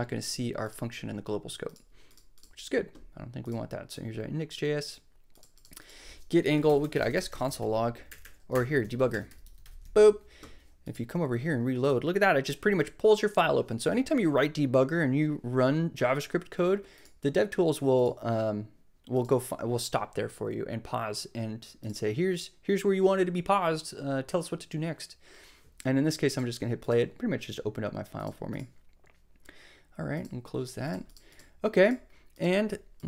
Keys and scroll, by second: 6.5 Return, 6.7-10.1 typing, 8.8 super+d.